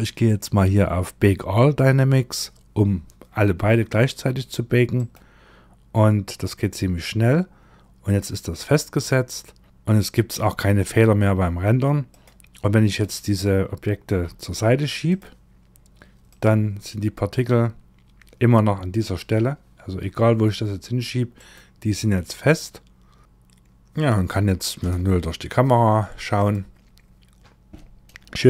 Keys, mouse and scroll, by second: 4.4 click, 7.5 click, 11.6 click, 12.3 click, 13.7 g, 15.7 click, 18.6 g, 24.2 KP_0, 25.8 click, 28.0 shift+`.